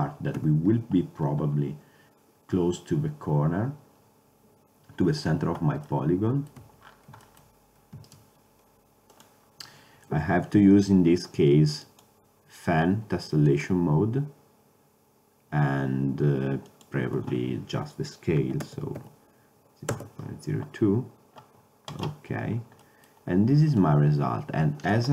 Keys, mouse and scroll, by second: 0.5 KP_7, 2.1-3.3 middle drag, 6.7 Tab, 8.2-9.2 right drag, 22.9 middle click, 23.9-24.6 drag.